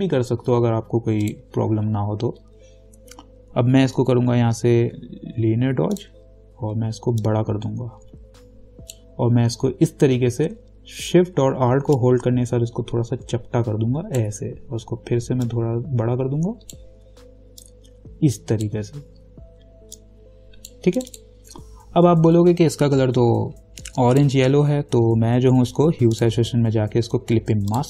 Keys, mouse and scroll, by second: 6.2 click, 7.4-12.2 alt+drag, 8.8-11.1 alt+drag, 12.2-17.3 alt+shift+drag, 17.8 alt+shift+click, 24.3 click.